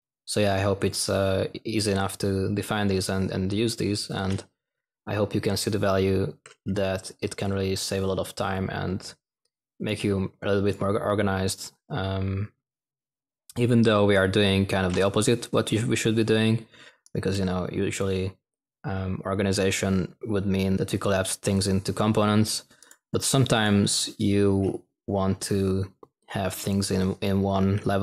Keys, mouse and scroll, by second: 0.0 x.